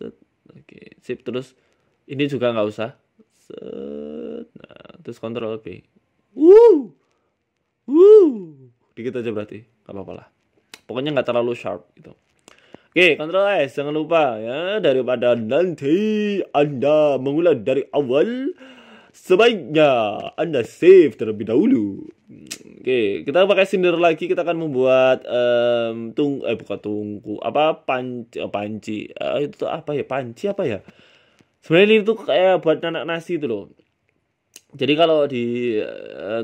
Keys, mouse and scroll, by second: 0.9 middle click, 1.0 middle click, 1.2-1.5 scroll down 3, 1.4 middle click, 2.5 KP_1, 3.4 c, 5.1 middle click, 5.8 ctrl+b, 10.7 Tab, 10.9 middle click, 11.7 scroll down 3, 11.7 scroll up 1, 12.2 scroll down 2, 17.3 KP_1, 17.8 shift+middle click, 18.7 shift+a, 20.2-20.7 scroll down 2, 20.9 g, 22.2 shift+middle click, 22.8 s, 23.6-23.9 scroll up 9, 24.0 shift+middle click, 24.3 Tab, 24.6 click, 25.3 e, 25.8 s, 27.1 shift+middle click, 27.6 click, 27.9 s, 29.2 click, 30.2 ctrl+b, 33.3 Tab, 33.7 shift+middle click, 34.4 click, 35.0 Tab, 35.3 click, 36.1 ctrl+b.